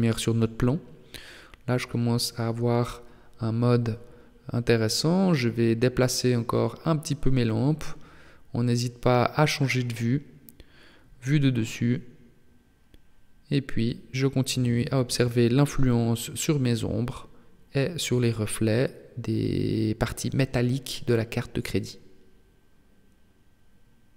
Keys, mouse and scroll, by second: 0.5 right click, 2.1 middle click, 4.4 g, 9.3 KP_7, 10.9 g, 13.1 g, 14.1 KP_7, 19.4 g, 23.8-24.1 scroll up 2.